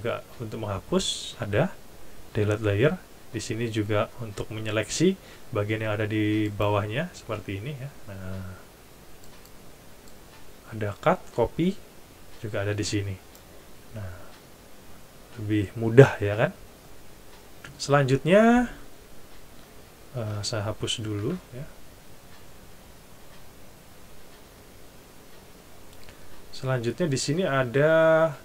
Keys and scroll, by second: 21.2 shift+super+F11.